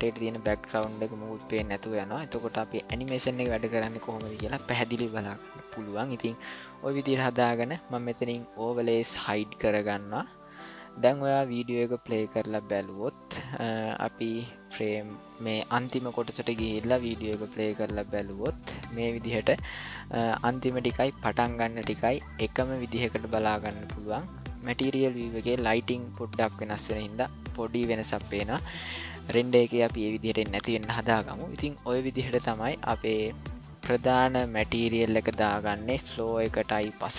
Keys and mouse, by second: 8.5 click, 11.9-16.3 drag, 17.1 click, 19.7 click, 20.4 click, 21.3 click, 23.6 click, 32.4 click, 33.1 middle click, 34.0-35.5 middle drag, 35.9-36.9 ctrl+middle drag.